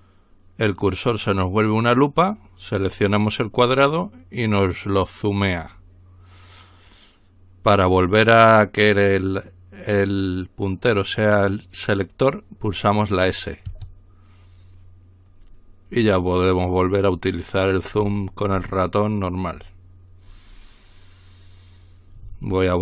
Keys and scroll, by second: 13.8 s.